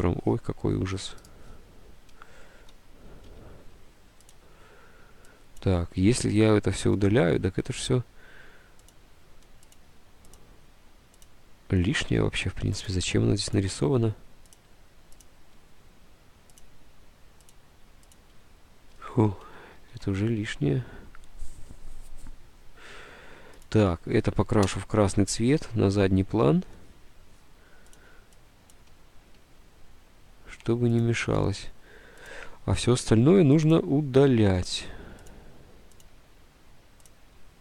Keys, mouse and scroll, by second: 0.0 ctrl+z, 3.4 ctrl+u, 7.0 Delete, 7.6 Delete, 8.2 Delete, 9.2 Delete, 10.1 Delete, 10.7 Delete, 11.5 Delete, 13.1 Delete, 13.7 Delete, 16.9 Delete, 17.6 Delete, 18.4 Delete, 19.8 Delete, 20.0 ctrl+z, 24.8 ctrl+End, 30.1 ctrl+z, 32.9 Delete, 32.9 ctrl+z, 34.2 Delete, 34.7 Delete, 35.5 Delete, 36.2 Delete, 37.4 Delete.